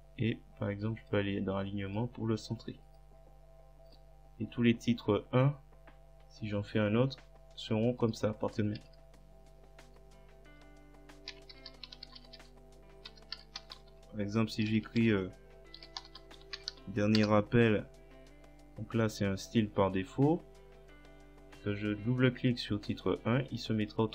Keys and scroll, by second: 8.9 Return, 11.1-17.2 typing.